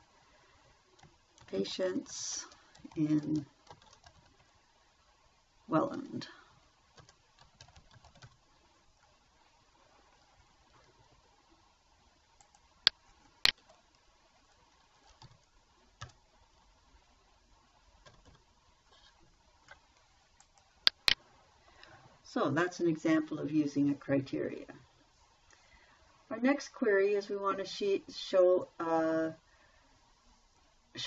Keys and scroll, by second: 0.1 a, 1.2-4.9 typing, 7.0-9.1 typing, 15.6 t, 16.4 i, 18.5 Delete.